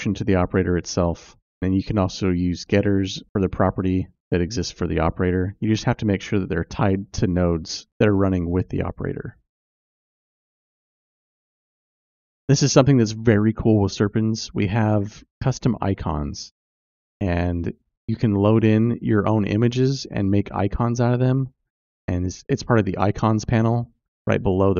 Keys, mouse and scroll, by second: 1.4-4.2 drag, 10.9 click, 19.8 click, 22.0 click.